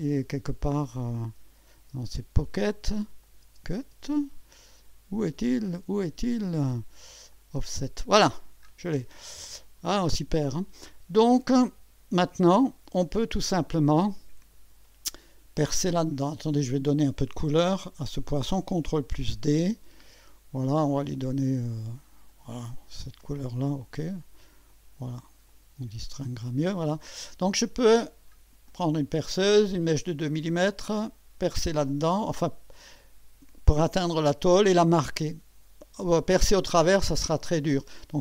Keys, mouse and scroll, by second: 0.4 click, 1.4 space, 3.2 click, 3.4 space, 4.7 click, 5.2 scroll down 1, 7.3 click, 7.6 space, 8.3 scroll down 1, 9.0-13.7 drag, 14.0-14.9 drag, 16.0-16.6 drag, 16.8 click, 19.0 ctrl+d, 20.0 click, 22.3 click, 23.6 click, 24.7 click, 25.5 click, 26.4 click, 26.9 click, 28.1 scroll down 2, 28.7-30.2 drag, 31.9-33.2 drag.